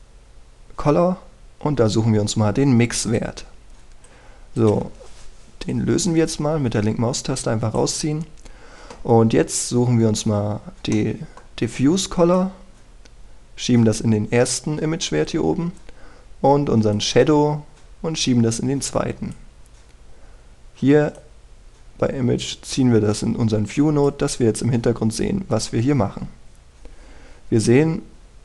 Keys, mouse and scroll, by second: 4.0-9.2 drag, 10.0-11.9 scroll up 1, 11.9-13.2 middle drag, 13.4-25.2 drag, 26.0-28.4 scroll down 1.